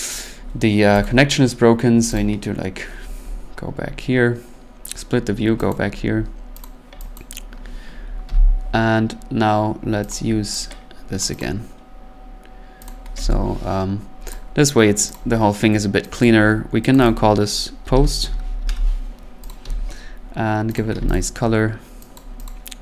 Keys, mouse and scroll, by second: 0.1 click, 1.0 click, 2.1 click, 2.7-3.9 scroll, 4.8-5.2 scroll, 5.7 click, 5.9 scroll, 6.6 click, 7.1 click, 8.2 p, 10.1 click, 11.2 click, 11.4 click, 12.9 click, 13.2 p, 14.3 click, 15.2 click, 16.2 click, 16.5 scroll, 17.0 click, 17.1 click, 17.6-19.7 typing, 19.5 click, 20.8 click, 20.9 c, 21.1 click, 22.2 click, 22.5 click.